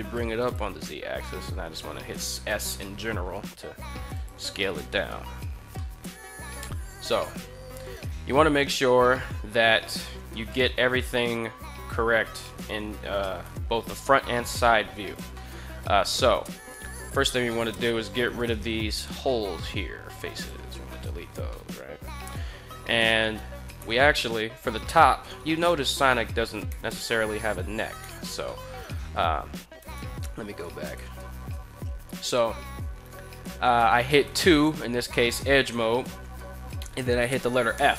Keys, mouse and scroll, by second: 0.1 click, 1.0 s, 3.9 click, 5.5 shift+middle drag, 6.9 KP_3, 8.1 shift+middle click, 10.3 alt+right click, 13.2 2, 14.7 alt+right click, 15.1 middle click, 16.4 3, 16.8 right click, 17.2 middle drag, 17.9 shift+right click, 18.5 x, 20.7 middle drag, 21.3 middle click, 23.6 2, 23.8-24.2 middle drag, 24.6 right click, 25.7 shift+right click, 26.5 f, 27.0 right click, 27.8 f, 28.2 middle click, 29.6 ctrl+z, 29.8 ctrl+z, 30.7 ctrl+z, 34.0 2, 37.5 f.